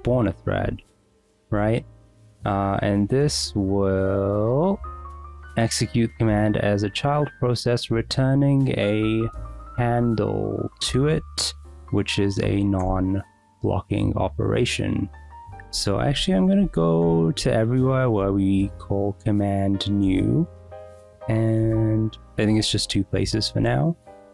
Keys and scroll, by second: 0.0-2.3 typing, 0.2 Escape, 9.4 w, 12.9 Escape, 15.5-18.2 typing, 22.1 j, 23.5-24.3 typing.